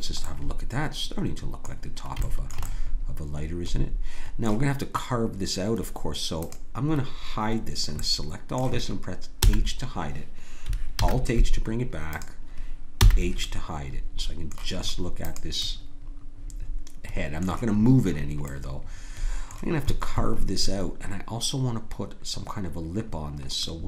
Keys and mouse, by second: 0.3 click, 6.4-8.3 drag, 9.4 h, 11.0 alt+h, 13.0 h, 16.8-23.8 drag.